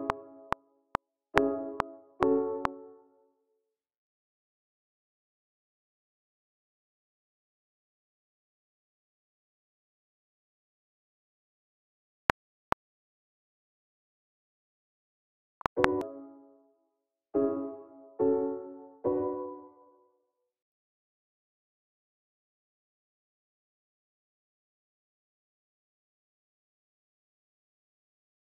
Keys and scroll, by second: 0.0-4.3 typing, 3.0 super+k, 3.8 super+a, 5.3 super+z, 7.8 super+a, 8.2 q, 9.3 super+z, 11.4-13.6 typing, 19.0-19.5 typing, 20.0 alt+super+l, 20.3 ctrl+alt+m, 20.5 alt+Right, 20.9 e, 23.6 typing, 24.1 alt+super+s, 24.2 alt+x, 25.4 super+w.